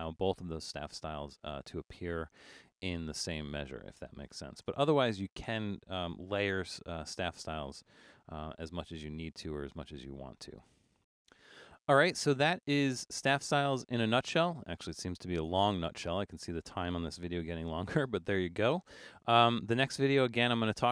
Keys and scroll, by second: 4.7 BackSpace, 8.4 super+-, 9.3 super+-, 9.6 super+=, 19.4 super+-, 20.3 super+-.